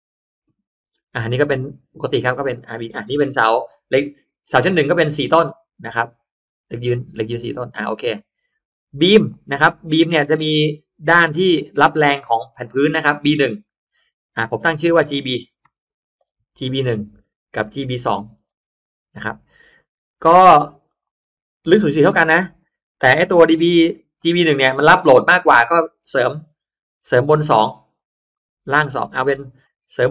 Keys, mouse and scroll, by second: 1.8 click, 2.0 click, 3.3 9, 3.9 click, 8.0 click, 8.9 click, 11.0-12.4 drag, 14.4 click, 16.1 shift+BackSpace, 16.4 shift+b, 16.9 1, 17.1 Return, 18.2 shift+b, 18.6 2, 19.0 Return, 20.8 click, 21.6 0, 22.2 4, 22.9 click, 25.7 click, 26.8 3, 28.2 click, 28.8 2, 29.5 click, 29.9 3.